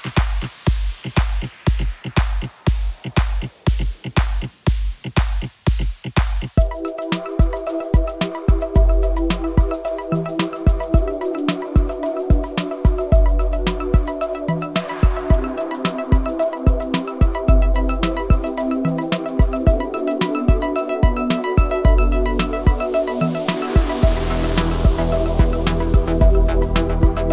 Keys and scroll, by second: 3.0 Delete, 8.0 Delete, 14.1 Delete, 21.8 Delete, 26.6 Delete.